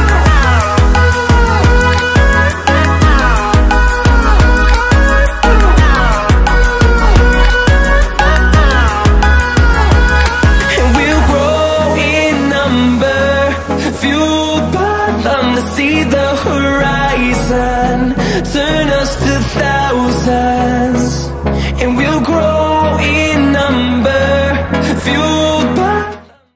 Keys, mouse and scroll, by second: 0.4-2.1 scroll up 2, 2.1 click, 6.2 click, 10.7 click, 16.9 click.